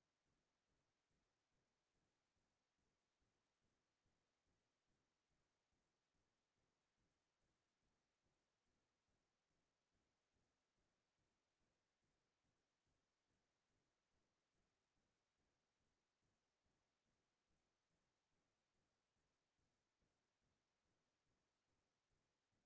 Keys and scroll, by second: 4.7 space, 11.3 space, 14.8 ctrl+t, 21.1 Return.